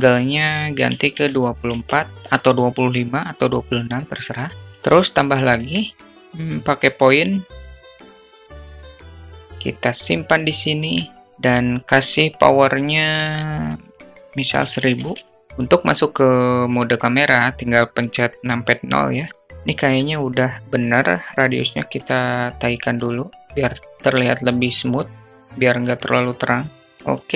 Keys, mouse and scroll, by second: 5.0 shift+a, 7.9 alt+middle drag, 8.3 click, 9.0 click, 10.0 alt+click, 11.7-15.3 drag, 14.4 o.